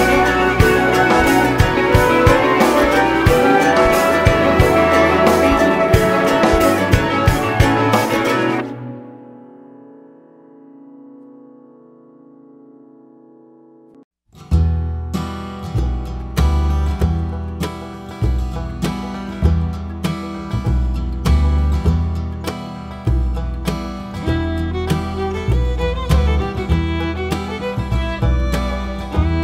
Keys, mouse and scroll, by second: 0.3 scroll down 2, 0.8 KP_0, 1.2 KP_1, 1.3 scroll up 1, 1.6 `, 2.1 ctrl+alt+KP_0, 3.1 g, 3.6 click, 3.8 scroll up 1, 3.9 alt+a, 4.1 scroll down 1, 4.3 ctrl+s, 6.4 click, 6.8 scroll up 1, 7.1 scroll down 1, 7.3 KP_7, 10.1 scroll down 1, 10.3-12.1 typing, 11.1 scroll down 1, 12.3 click, 12.4 scroll up 1, 12.5 alt+a, 13.1 click, 13.5 KP_7, 14.0 g, 14.2 click, 15.2 click, 15.8 r, 16.2 KP_1, 17.3 click, 18.3-23.1 typing, 19.5 click, 21.4 click, 22.3 click, 22.9 scroll up 1, 23.8 click.